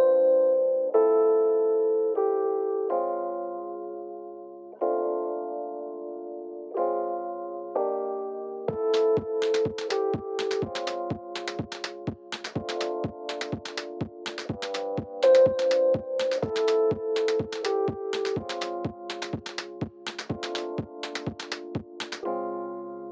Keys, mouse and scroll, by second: 0.1 3, 0.3 click, 0.5-4.7 middle drag, 0.9 g, 1.8 click, 3.0 g, 4.0 click, 4.4 1, 4.7 click, 5.0 g, 5.9-7.8 middle drag, 6.8 g, 7.8 click, 8.1 g, 9.5-12.5 middle drag, 9.6 Tab, 10.0 scroll down 2, 11.4 scroll up 2, 12.0 Tab, 12.5 2, 12.5 click, 13.0 g, 14.4 Tab, 14.7 g, 16.6-18.3 middle drag, 16.9 g, 18.3 click, 18.4 Tab, 18.6 click, 18.9 3, 19.1 click, 19.2 shift+click, 20.7-23.1 middle drag, 21.4-21.8 scroll up 2, 22.3 i.